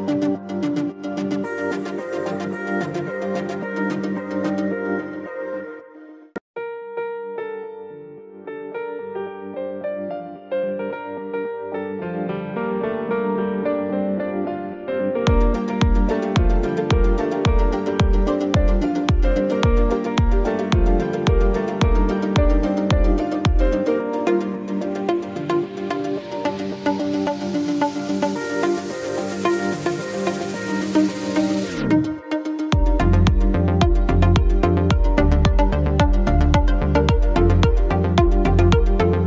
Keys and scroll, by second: 4.9 ctrl+c, 7.3 ctrl+c.